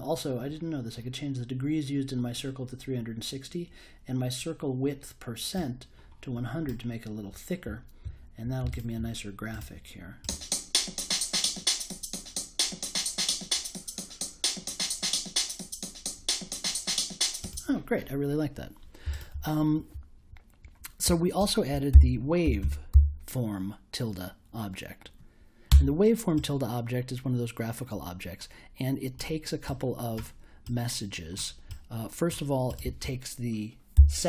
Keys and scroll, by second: 21.9-23.4 typing, 25.6 Return, 33.7-34.2 typing.